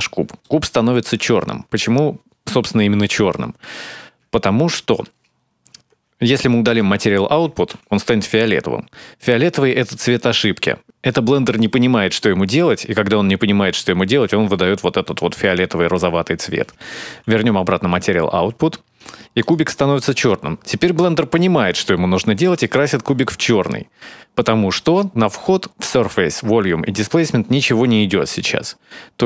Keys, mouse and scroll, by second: 0.2 shift+middle click, 3.6-4.2 scroll up 2, 4.2 shift+middle click, 6.4 click, 7.5 x, 17.0 shift+a.